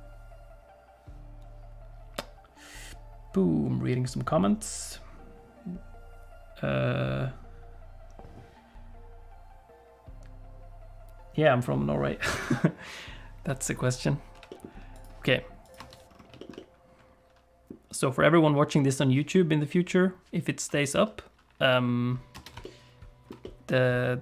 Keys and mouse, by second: 14.3 g, 15.7 click, 15.8 space, 16.4 shift+click, 16.5 middle click, 17.2 click, 22.3 space, 22.7 ctrl+click, 23.3 middle click, 23.5 middle click.